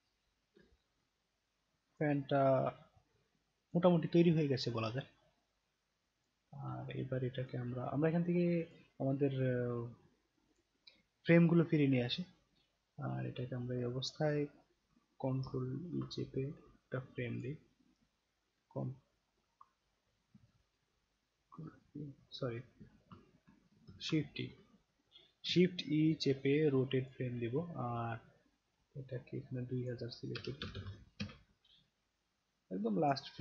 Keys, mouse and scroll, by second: 0.6-1.9 alt+drag, 2.9-3.7 alt+drag, 6.2 click, 7.0-7.4 alt+drag, 8.6 click, 10.5 click, 13.7 scroll down 1, 13.9-15.4 scroll up 2, 17.3 click, 21.5 ctrl+e, 23.1 ctrl+z, 24.2 shift+e, 26.4-27.1 alt+drag, 29.6 click, 32.3 click.